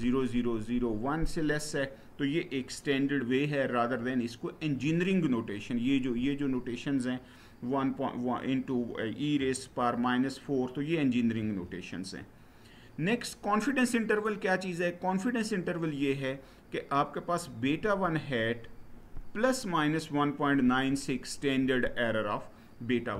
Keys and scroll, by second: 11.2 Right.